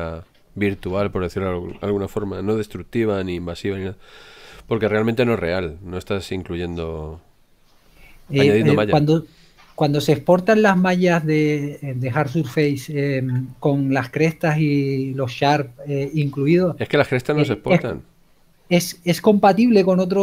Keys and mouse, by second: 0.0 click, 11.2 shift+middle click.